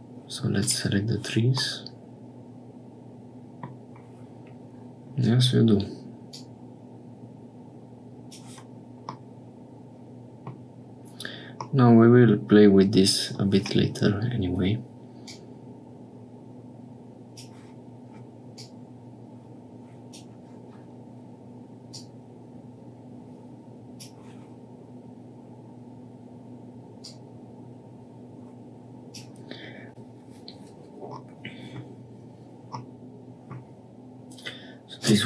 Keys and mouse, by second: 1.6-3.6 middle drag, 6.3-8.3 middle drag, 9.2-10.4 middle drag, 11.7-13.4 middle drag, 15.3-17.3 drag, 18.5-20.2 drag, 21.9-24.1 drag, 27.0-29.2 drag, 31.2 middle click, 32.7 middle click, 34.9 click.